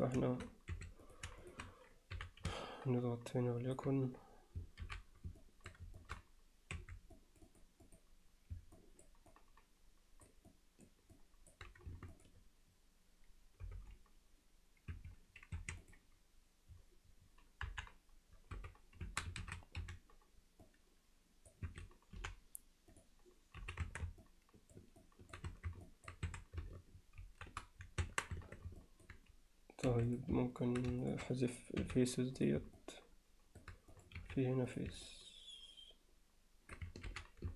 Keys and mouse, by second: 0.8 3, 1.0 click, 1.5 shift+click, 2.2 h, 2.6-3.8 middle drag, 4.9 alt+h, 5.4 alt+middle click, 6.0 shift+middle click, 6.8 2, 7.3 click, 8.8 alt+middle click, 9.3 alt+middle click, 10.5 middle click, 11.2 alt+middle click, 12.1 shift+click, 13.6 g, 15.6 1, 17.7 KP_1, 18.5 z, 19.1 a, 19.8 c, 22.2 m, 23.6 z, 23.9 Tab, 24.2 alt+middle click, 25.0-25.4 alt+middle drag, 25.5 Tab, 25.9 alt+middle click, 26.3 a, 27.3 shift+n, 28.0 Tab, 28.4 Tab, 28.8 alt+middle click, 29.9 3, 30.2 click, 31.0 shift+click, 31.8 x, 32.8-33.6 alt+middle drag, 33.9 click, 34.2 x, 35.1-36.7 alt+middle drag, 37.1 alt+h.